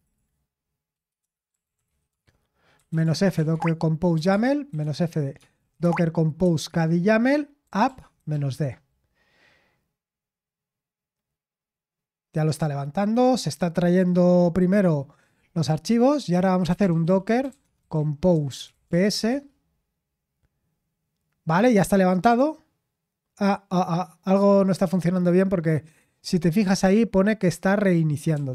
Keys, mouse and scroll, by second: 0.0-8.5 typing, 17.5-19.5 typing.